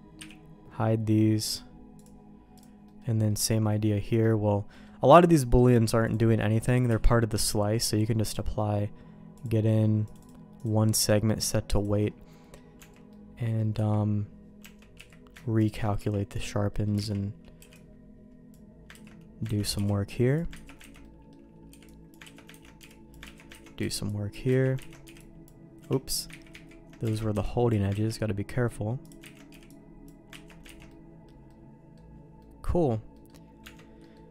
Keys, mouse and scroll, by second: 0.2 h, 1.4 click, 2.0 click, 2.9 middle click, 3.3 middle click, 3.9 middle click, 4.7 middle click, 6.9 q, 8.6 middle click, 9.4 click, 10.1-11.8 drag, 12.4 middle click, 12.8 Tab, 13.1 middle click, 13.8 q, 14.6 Tab, 15.0 q, 16.0 Tab, 16.7 middle click, 17.0 alt+a, 17.6 b, 18.9 ctrl+q, 19.6 ctrl+x, 19.8 b, 20.7 ctrl+q, 20.9 ctrl+x, 21.0 middle click, 21.7 b, 22.3 ctrl+q, 22.6 ctrl+x, 22.8 b, 23.4 ctrl+q, 23.5 ctrl+x, 23.8 b, 24.6 ctrl+q, 24.8 ctrl+x, 25.0 b, 25.8 Escape, 26.0 middle click, 26.5 ctrl+z, 27.1 alt+a, 27.3 b, 27.9 ctrl+q, 29.0 click, 29.4 ctrl+x, 29.5 b, 30.3 ctrl+q, 30.7 ctrl+x, 30.9 middle click, 31.5 middle click, 32.4 middle click, 33.1 middle click, 33.6 Tab, 34.0 middle click.